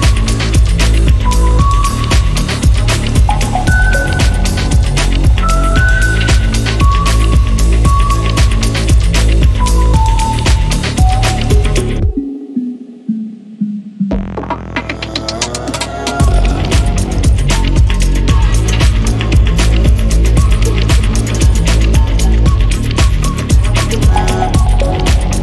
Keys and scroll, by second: 6.8 Escape, 11.2 Escape, 12.8-13.8 typing, 15.1 Escape, 16.6 Escape, 22.1 Escape.